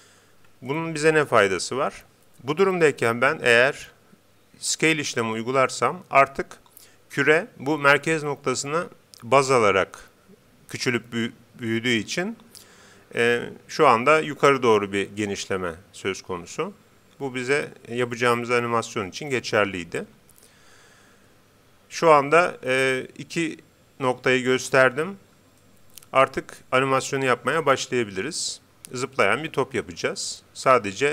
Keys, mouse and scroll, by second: 0.8-2.6 middle drag, 5.1 s, 25.6-27.2 middle drag, 27.4 middle click.